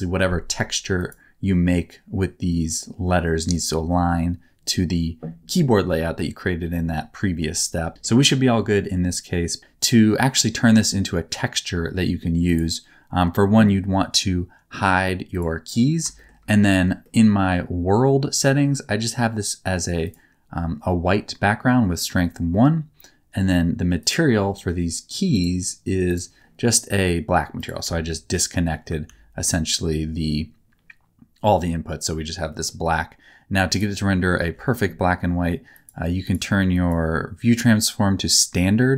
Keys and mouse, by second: 0.9 middle click, 7.9 shift+middle click, 10.9 middle click, 15.3 click, 16.1 shift+middle click, 17.0 middle click, 18.5 middle click, 20.0 click, 24.0 click, 25.4 click, 27.5 click, 27.8 x, 28.8 middle click, 29.1 ctrl+s, 32.5 middle click, 35.8 click, 36.7-38.2 drag.